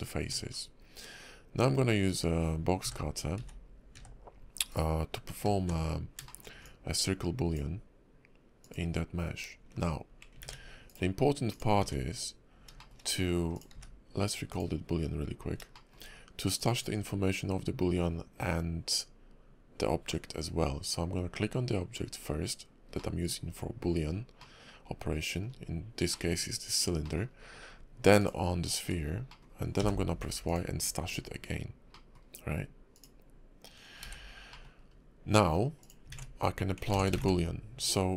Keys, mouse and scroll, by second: 0.0 scroll up 2, 0.2 Tab, 0.5 scroll down 5, 1.0-2.8 scroll up 2, 2.8 f, 3.3 d, 3.9 d, 5.4 d, 6.3 shift+middle click, 6.6 click, 9.1 scroll up 3, 10.9 right click, 11.5 click, 12.8 shift+middle click, 13.5 click, 13.7 q, 15.7 shift+middle click, 20.3-22.0 scroll up 1, 23.0 middle click, 24.4 middle click, 26.1 middle click, 27.0 middle click, 27.3-27.8 scroll up 1, 28.2 shift+click, 28.9-29.3 scroll down 2, 29.3 middle click, 29.8 y, 31.9 middle click, 32.9 click, 34.0 h, 34.2 scroll down 2, 34.5 middle click, 34.8 scroll up 2, 35.8 click, 37.2 ctrl+super+`.